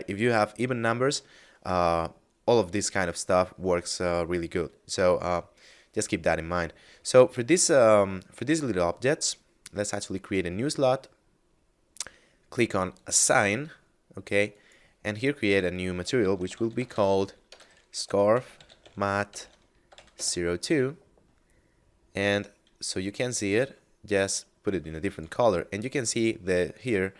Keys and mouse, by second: 10.1 click, 12.9 click, 16.2-18.7 typing, 19.8 0, 20.1 Return, 23.5 click.